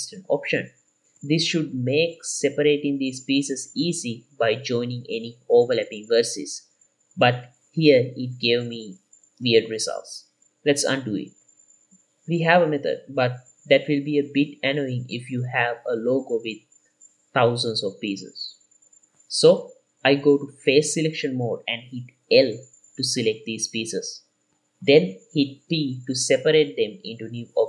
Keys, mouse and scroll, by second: 0.0 n, 0.1 middle click, 0.9 middle click, 1.4 Tab, 2.2 Tab, 3.0 shift+middle click, 4.6 m, 8.5 Tab, 10.2 scroll up 2, 11.8 ctrl+z, 12.2 ctrl+z, 13.1 alt+a, 13.5 middle click, 14.3 Tab, 14.8-15.3 scroll down 2, 15.2-15.7 middle drag, 16.1 shift+middle click, 17.0 middle click, 17.5 Tab, 19.1 alt+a, 19.2 middle click, 20.1 3, 22.9 l, 23.5 l, 23.8 middle click, 24.8 l, 26.4 p, 27.1 middle click.